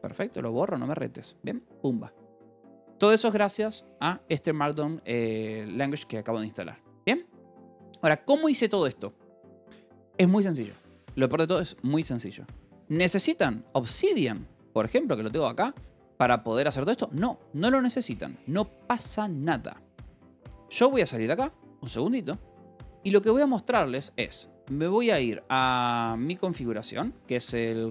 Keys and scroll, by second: 0.0 BackSpace, 0.1 Escape, 1.2 ctrl+s, 5.7 k, 6.3 j, 18.4 j, 20.2 q, 20.8 Return, 24.0 c, 24.1 space, 25.7-27.9 typing.